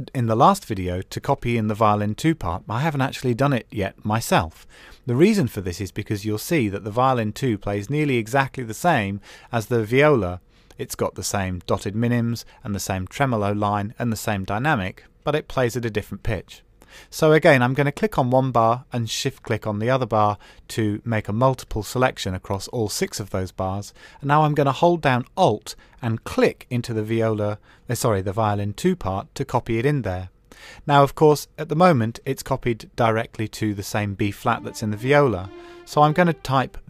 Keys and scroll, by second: 33.9 Up.